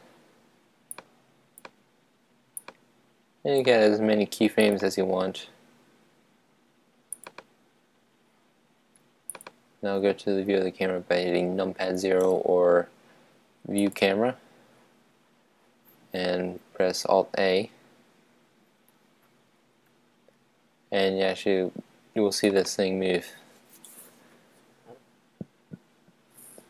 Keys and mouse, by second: 0.2 right click, 1.4-4.4 drag, 4.7-9.1 drag, 9.5-14.1 drag, 17.4 super+a, 19.6 alt+a, 22.7-24.2 right drag.